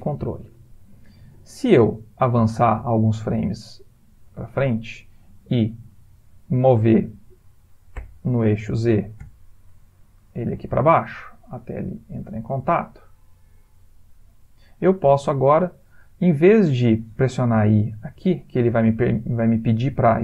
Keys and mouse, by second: 2.2 click, 8.1 g, 17.8 i.